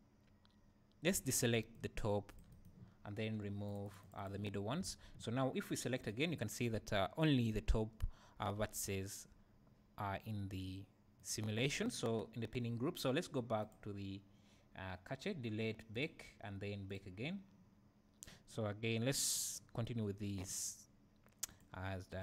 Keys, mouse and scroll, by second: 1.1 c, 2.6 right click, 3.7 click, 4.9 alt+a, 6.0 click, 6.8 `, 8.5 Tab, 8.8 `, 11.2-13.6 right drag, 13.6-22.2 drag.